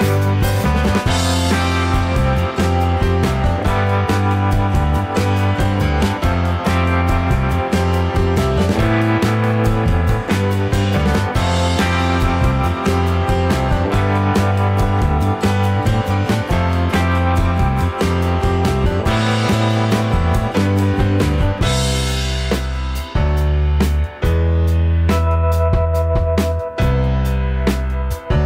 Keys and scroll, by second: 0.9 Right, 2.4 ctrl+-, 4.4 ctrl+z, 15.0 shift+Right, 15.1 shift+Up, 15.7 alt+shift+Left, 16.3 ctrl+z, 18.3 Delete, 18.9 shift+Right, 19.0 shift+Left, 19.1 shift+Up, 26.4 ctrl+z.